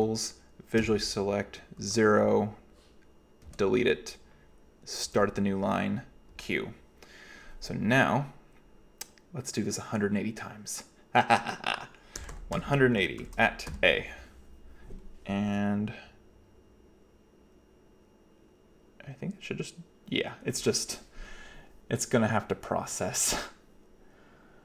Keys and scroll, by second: 0.0-2.0 typing, 3.2-4.0 typing, 5.1 typing, 6.3 typing, 12.0-13.7 typing.